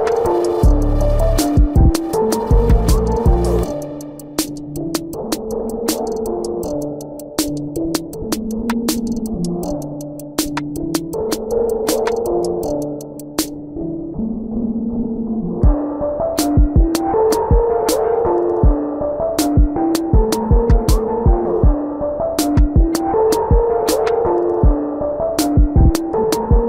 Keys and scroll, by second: 1.5 space, 2.4 space, 4.5-14.1 typing, 12.1 ctrl+alt+z, 17.8 space, 19.8 space, 21.2 space, 22.2 space, 23.2 ctrl+-, 23.4 space, 24.2 space.